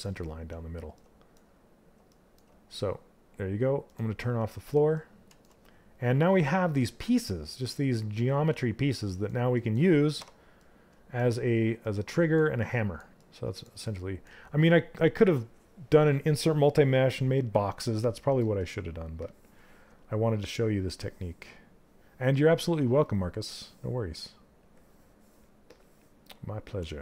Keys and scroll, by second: 9.7 q.